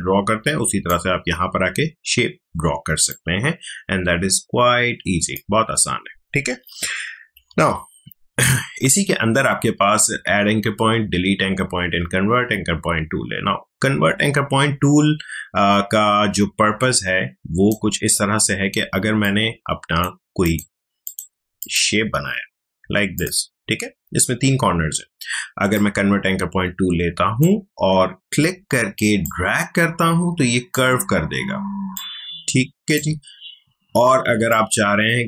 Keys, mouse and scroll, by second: 3.1-6.9 drag, 6.9 ctrl+alt+z, 8.4-18.4 drag, 19.2 click, 25.7-35.2 drag.